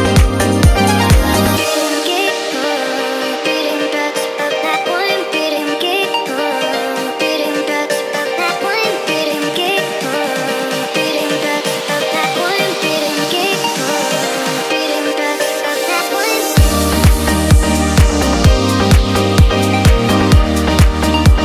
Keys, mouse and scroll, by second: 0.7 click, 0.7 3, 2.3 i, 4.6 click, 5.5 click, 7.7 i, 9.7 click, 10.5-11.6 drag, 12.1-13.4 middle drag, 13.7 click, 14.0 middle click, 14.9-16.1 drag, 17.1-18.3 drag, 19.4-21.2 middle drag.